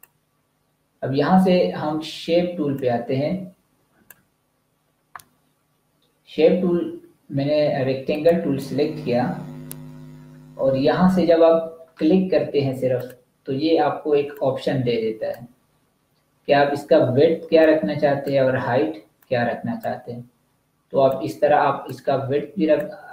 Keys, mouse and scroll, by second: 2.7 shift+click, 8.1 click, 12.9 click, 17.5 click.